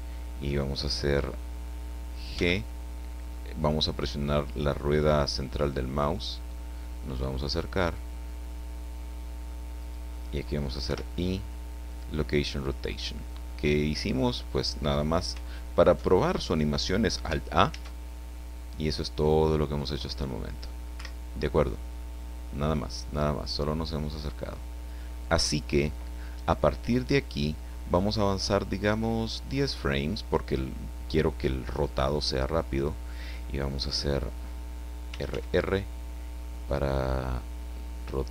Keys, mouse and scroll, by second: 2.3 g, 5.5 middle click, 9.8 click, 10.8 i, 11.9 click, 13.8 click, 17.7 alt+a, 20.9 Escape, 23.0 click, 23.4-25.6 drag, 29.5 click, 35.1 r.